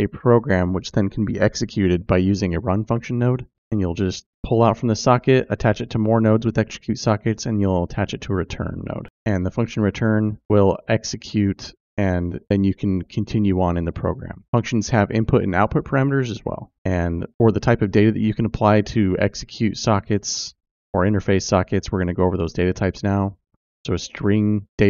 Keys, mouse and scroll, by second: 22.8 click.